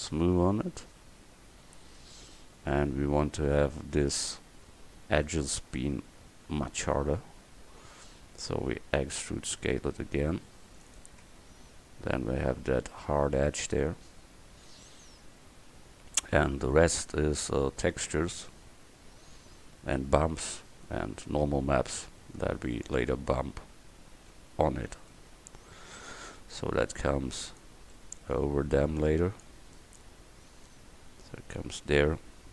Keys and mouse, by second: 0.0 right click, 1.0-2.1 right drag, 2.1 Tab, 9.0 e, 11.3 Tab, 23.4 KP_1, 25.2 middle click, 26.1-27.6 middle drag, 27.6 click, 28.0 middle click, 28.2-32.4 middle drag.